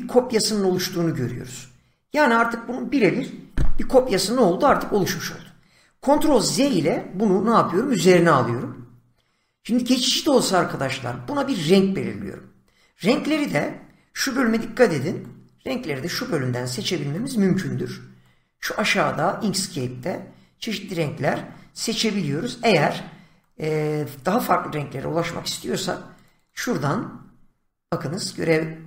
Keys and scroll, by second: 6.4 ctrl+z, 14.2 <.